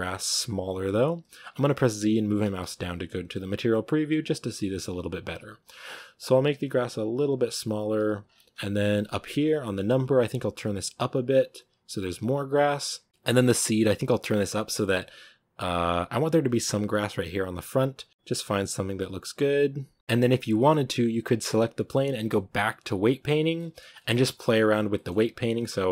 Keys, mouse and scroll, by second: 2.2 z, 2.6 z, 6.2-20.0 shift+drag, 20.0-21.1 scroll up 2, 21.3-23.1 right drag, 23.1 click, 23.4 middle click, 24.1 scroll up 1, 24.1-25.3 shift+middle drag, 25.3-25.9 drag.